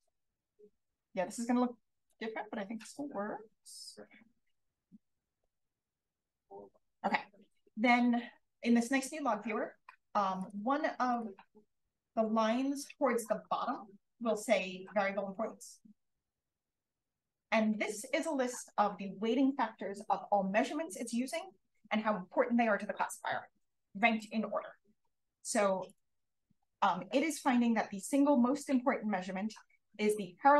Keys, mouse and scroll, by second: 10.3 click, 11.1 click, 25.8-30.4 drag.